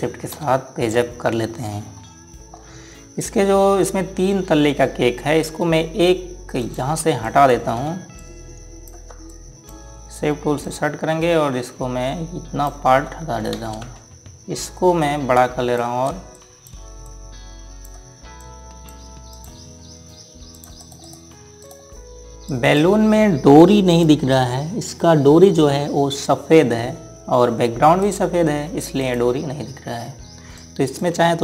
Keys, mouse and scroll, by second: 1.1 Page_Up, 2.6 scroll down 1, 3.3 scroll up 1, 7.4 click, 8.9 click, 10.0 click, 11.4 click, 14.3 space, 15.8 click, 17.1 click, 21.6 right click, 22.3 click, 28.8 right click, 31.3 click.